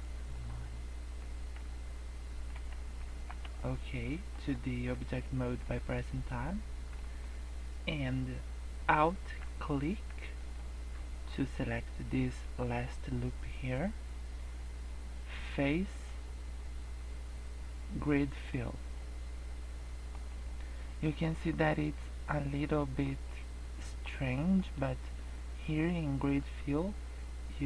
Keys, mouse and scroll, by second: 0.2 click, 1.2 Tab, 1.5 Tab, 2.5 g, 3.4 Tab, 4.0 middle click, 4.3 scroll up 2, 4.5 shift+middle click, 5.2 middle click, 6.9 middle click, 9.5 scroll up 5, 10.3 alt+click, 10.9 scroll down 5, 15.8 click, 18.9 middle click, 20.1 scroll up 1, 20.5 middle click, 21.5 middle click, 23.2 middle click, 24.3 scroll down 2, 24.5 middle click, 26.2 click.